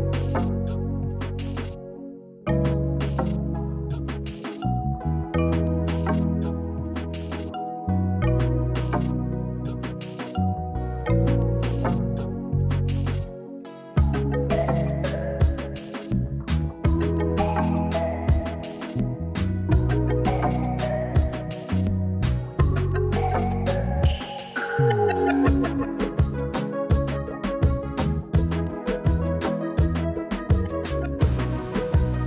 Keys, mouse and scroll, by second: 0.5 click, 0.8 middle click, 2.4 click, 2.9 f, 3.4 click, 3.8-5.4 middle drag, 5.7 KP_1, 6.8 Tab, 7.4 click, 8.8 click, 9.4 Tab, 10.6 click, 13.1 shift+e, 16.6 click, 17.5 click, 17.7 click, 18.0 Tab, 18.2 click, 19.6 middle drag, 20.1 Tab, 20.6 click, 21.8 shift+e, 24.5 click, 24.7 Tab, 25.1 Tab, 25.4-26.0 middle drag, 26.5 middle drag, 26.8 Tab, 27.2 click, 27.6 alt+shift+click, 28.9 shift+e, 30.7 click, 30.9 Tab, 31.1 drag, 31.3-31.7 middle drag, 31.8 click.